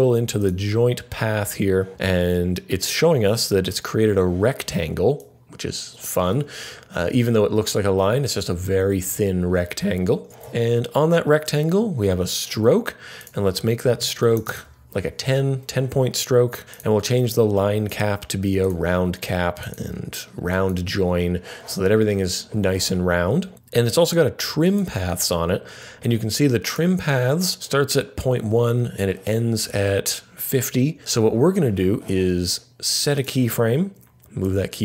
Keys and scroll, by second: 13.9-14.9 typing.